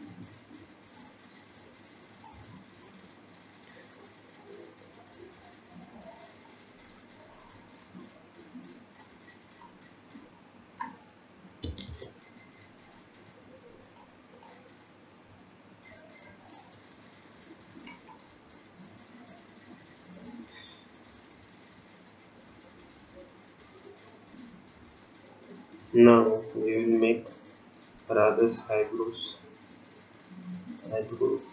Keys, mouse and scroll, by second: 3.2-6.4 scroll down 4, 6.5 click, 7.8-8.2 scroll up 1, 9.0 click, 14.3 click, 15.0 scroll up 1, 22.1 click, 29.4 click.